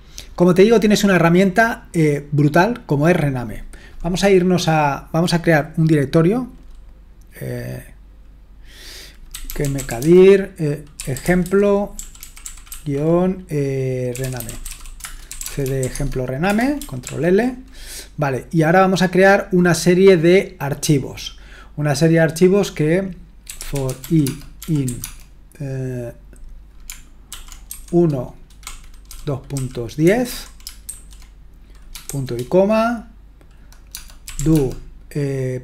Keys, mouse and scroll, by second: 9.1-16.1 typing, 16.5 Return, 17.1 ctrl+l, 23.2-25.3 typing, 27.3-27.7 typing, 28.8-30.8 typing, 32.1 typing, 33.9-34.9 typing.